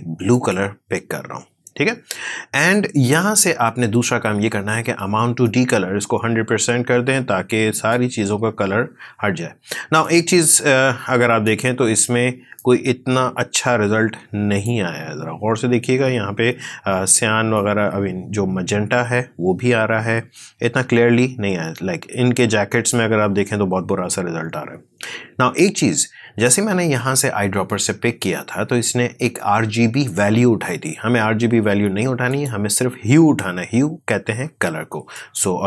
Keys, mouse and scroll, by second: 0.2 click, 5.3-9.9 drag, 9.9-17.0 drag, 17.4-25.4 drag, 32.2 click, 35.0 click.